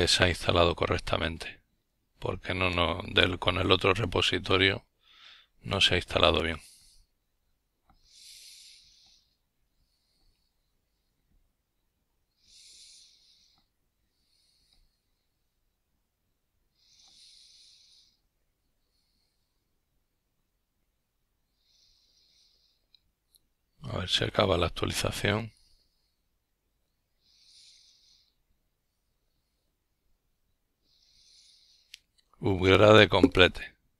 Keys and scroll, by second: 23.9 ctrl+l, 25.9-28.6 typing.